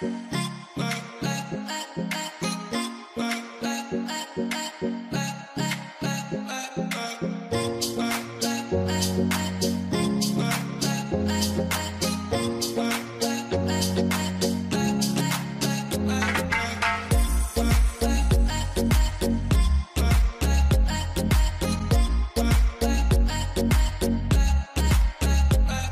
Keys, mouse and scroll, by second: 0.6 scroll up 1.